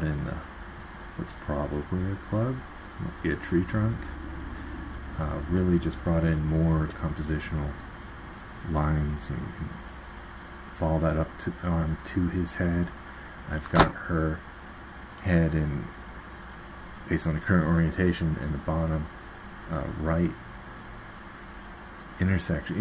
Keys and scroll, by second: 5.5 ctrl+z.